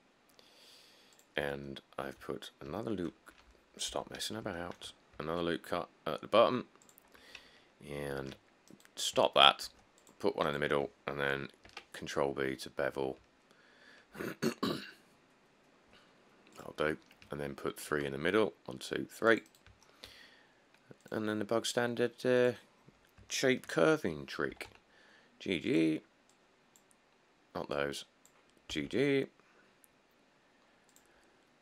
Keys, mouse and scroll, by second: 4.1 1, 4.4 click, 4.5 click, 5.4 ctrl+r, 8.3 ctrl+r, 9.9 ctrl+r, 11.9 ctrl+b, 17.3 middle click, 18.1 ctrl+r, 18.6 click, 19.1 click, 22.9 middle click, 23.0 middle click, 24.7 g, 24.9 g, 29.0 g, 29.1 g.